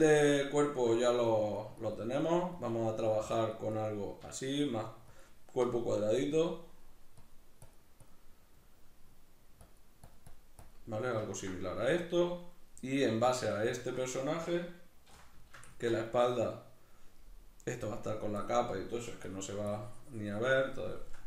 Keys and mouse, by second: 0.1-1.3 middle drag, 1.3-4.1 drag, 4.3 shift+middle click, 5.1 click, 6.1-7.2 middle drag, 7.2-8.4 drag, 8.4 middle click, 9.7-11.3 drag, 11.3 ctrl+middle click, 15.1 c, 15.4 shift+middle click, 15.8 ctrl+middle click, 18.4-21.2 drag.